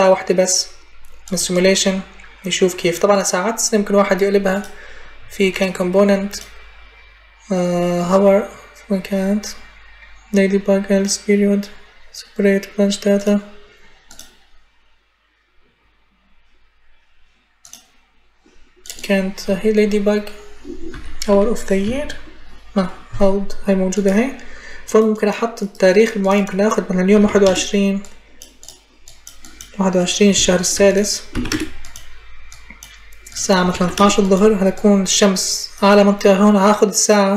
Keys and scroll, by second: 20.7 h, 21.1 o, 21.6 y, 26.7-27.5 typing, 31.1 6, 31.3 Return, 33.2-34.1 typing.